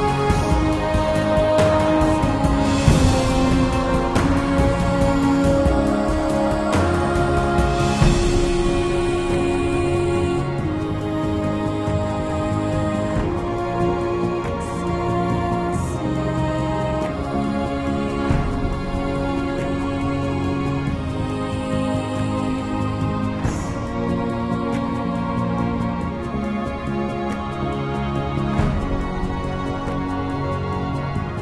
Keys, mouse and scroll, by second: 15.7 super+z, 15.9 click.